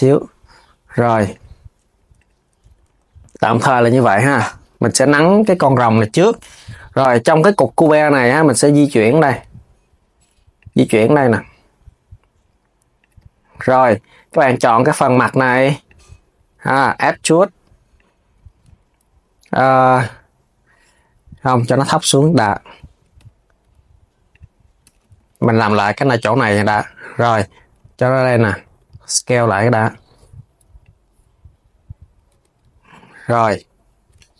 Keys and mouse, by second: 1.0 click, 1.9 click, 2.3 Tab, 2.5 KP_3, 3.5 s, 3.7 click, 3.9 Tab, 14.6-15.6 drag, 16.0 KP_3, 16.6 e, 18.3 z, 21.1 click, 21.3 KP_3, 22.6 g, 24.5 z, 27.0 g, 29.5 g, 32.0 KP_3.